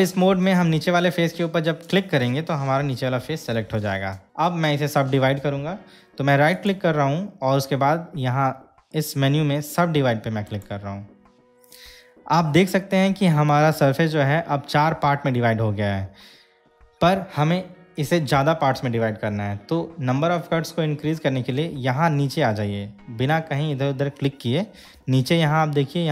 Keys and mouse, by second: 2.0 click, 6.7-10.9 right drag.